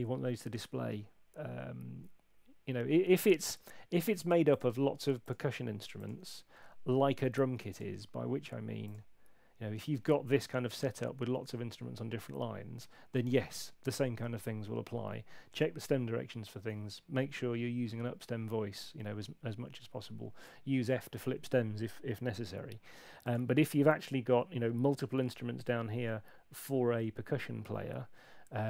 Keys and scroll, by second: 5.5 ↺.